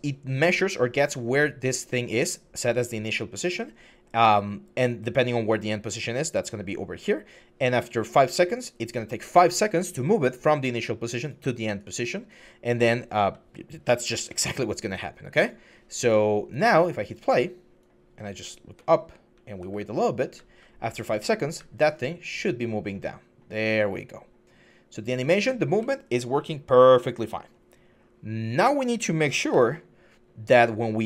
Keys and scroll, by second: 18.5-21.4 typing, 25.2 w, 29.3-31.0 typing.